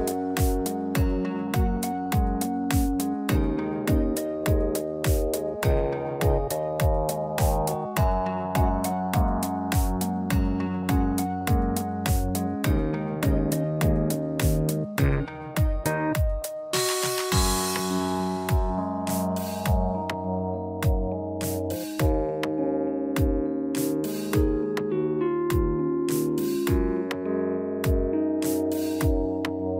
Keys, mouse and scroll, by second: 0.2 Tab, 0.3 click, 0.7 Tab, 2.2 click, 3.5-4.2 scroll up 3, 4.2 i, 7.5 alt+e, 15.2 ctrl+z, 16.3-16.8 scroll down 2, 16.6 Tab, 16.8 middle click, 17.3 scroll down 3, 17.9 click, 18.8 shift+middle click, 19.6 click, 20.0 middle click, 23.5 shift+a, 26.0 s, 27.3 click, 28.4 s.